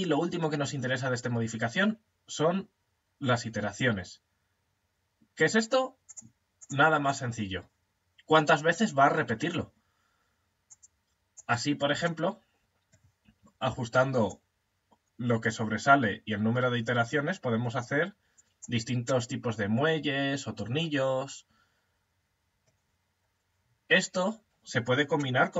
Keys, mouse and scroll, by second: 5.5 click, 10.1 click, 11.7-13.7 middle drag, 11.9 right click, 13.7 click, 18.7-20.7 middle drag, 24.8-25.5 middle drag.